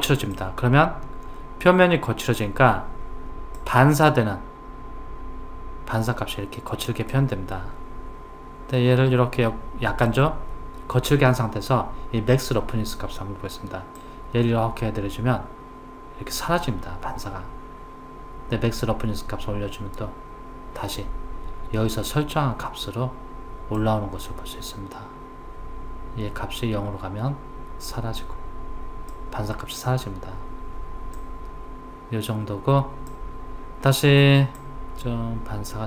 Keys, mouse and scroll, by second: 7.1 click, 14.0 click, 23.8 click, 31.2 click, 34.6 click.